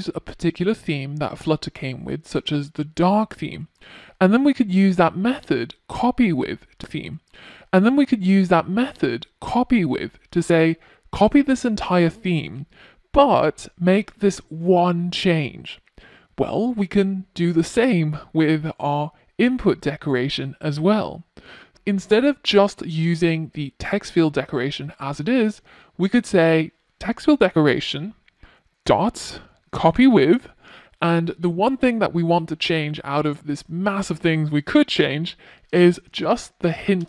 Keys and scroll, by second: 25.4 Return, 29.6 Return, 32.9 Return.